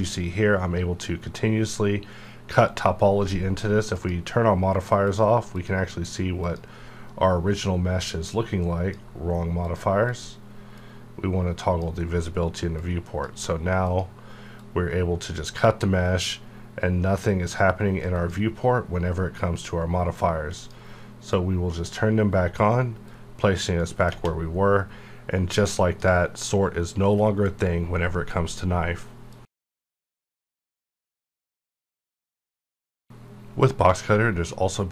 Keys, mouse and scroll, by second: 3.9-15.3 drag, 15.3 click, 16.3-18.1 drag, 18.1 click, 20.5-24.1 drag.